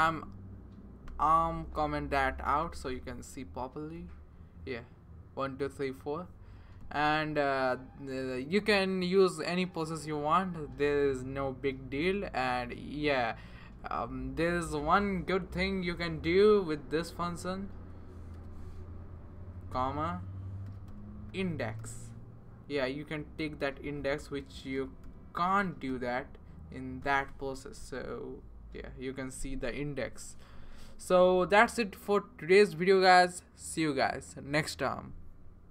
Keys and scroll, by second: 2.6 super+/, 15.5 (, 16.2 Right, 16.8 Right, 17.0 Right, 17.1 Right, 17.3 Right, 17.4-19.0 Right, 18.3 ), 19.0 Left, 19.7-22.3 typing, 24.5-27.5 typing.